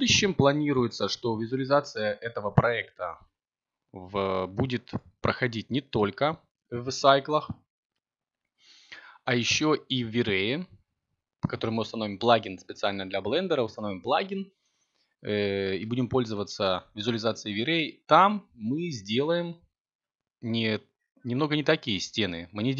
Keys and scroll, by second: 3.4 b, 11.0 b, 15.9 s, 17.0 c, 20.6 x.